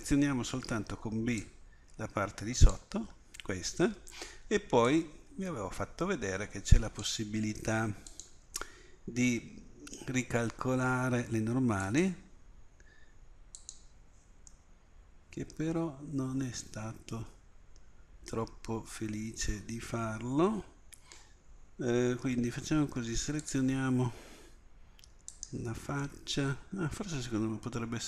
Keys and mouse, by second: 0.7 b, 4.9-10.0 drag, 11.9 click, 14.9-16.4 middle drag, 20.0-23.4 middle drag, 23.4-25.4 drag, 25.4 right click, 26.2-27.3 middle drag.